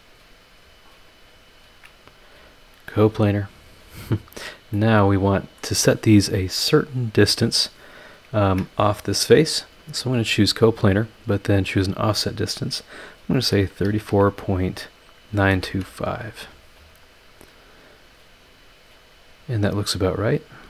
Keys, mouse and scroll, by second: 1.5 ctrl+click, 2.7 click, 3.6 click, 4.0-4.3 scroll down 2, 4.7-5.8 middle drag, 7.5 click, 8.4 ctrl+click, 10.3 click, 11.5 click, 13.4 KP_3, 13.8 KP_4, 14.1 KP_Decimal, 15.3 KP_9, 15.5 KP_2, 15.7 KP_5, 18.8-19.9 drag, 20.1 click.